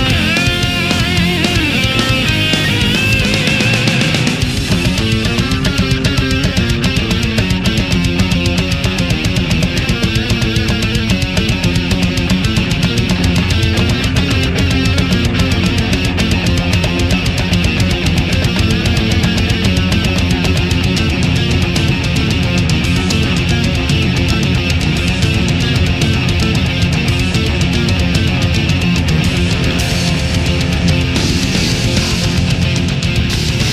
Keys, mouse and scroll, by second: 0.6 click, 1.9-3.1 drag, 3.4 right click, 4.7 click, 5.9-7.3 drag, 7.6 right click, 8.2-9.3 drag, 9.7 right click, 10.3 click, 11.4 right click, 11.9-12.9 drag, 13.9 right click, 14.7-16.7 drag, 17.3 right click, 17.9-19.3 drag, 19.7 click, 22.4 right click, 23.2-24.3 drag, 24.8 right click, 25.4-27.2 drag, 27.7 right click, 28.3 middle click, 30.2 right click, 30.8 shift+right click, 31.1 shift+middle click, 32.2 shift+right click, 32.8-33.7 shift+middle drag.